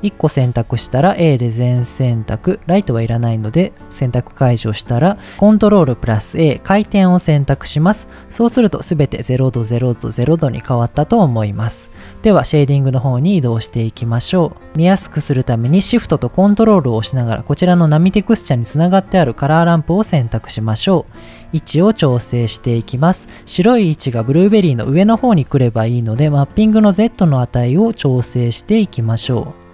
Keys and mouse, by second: 0.6 a, 2.6 ctrl+click, 5.6 ctrl+a, 8.9 click, 9.2 click, 11.0 click, 15.2 right click, 20.7 middle click, 21.9 middle click, 25.2 middle click, 26.8-29.7 shift+drag.